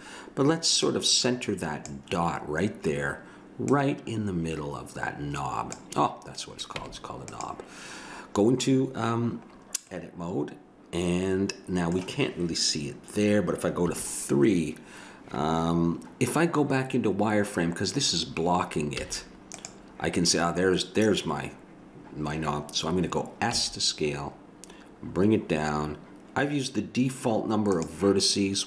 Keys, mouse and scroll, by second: 0.8-2.4 middle drag, 3.7-5.4 drag, 6.1-11.2 middle drag, 6.8 Tab, 13.8 KP_3, 19.0 z, 23.5 s.